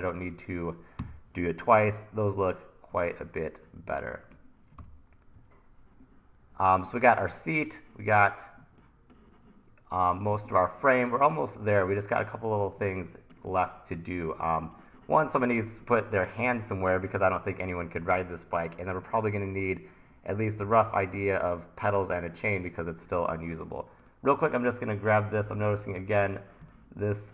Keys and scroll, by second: 1.0 BackSpace, 4.8 super+t, 5.4 super+r, 10.3 1, 13.5 1, 21.3 1.